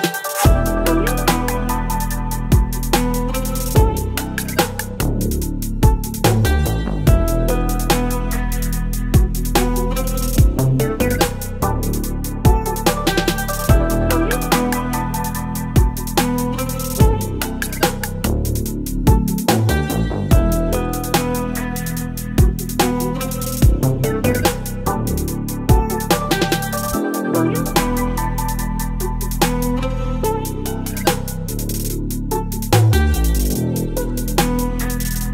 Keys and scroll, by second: 1.5 ctrl+t, 3.0 Return, 3.3 Left, 5.2 v, 6.0 Left, 6.1 Left, 8.5 l, 9.0 ctrl+BackSpace, 9.8 space, 12.6 ctrl+e, 15.1 space, 15.2 v, 15.7 ctrl+t, 21.9 Return, 22.2 space, 23.2 space, 23.8 l, 24.1 space, 27.2 Delete, 28.0 Delete, 28.7 Delete, 29.5 Delete, 30.6 ctrl+BackSpace, 31.7 ctrl+BackSpace, 33.3 Delete, 33.5 space, 34.3 space.